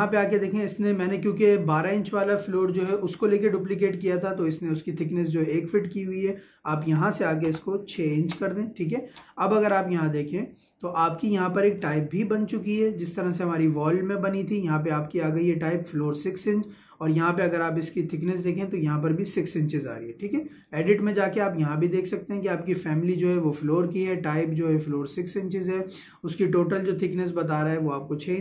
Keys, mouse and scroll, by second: 5.5-8.2 drag, 8.2 shift+', 10.3 click, 16.5 click, 20.7 click.